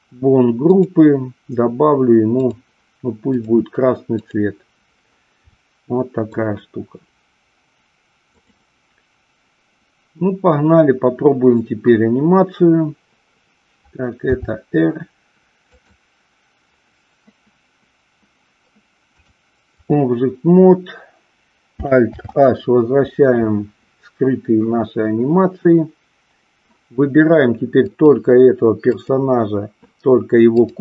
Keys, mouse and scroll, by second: 0.7 click, 2.4-3.6 drag, 5.6 middle click, 14.3 r, 15.8 click, 19.2-19.8 drag, 22.0 alt+h, 27.9 click, 30.4 click.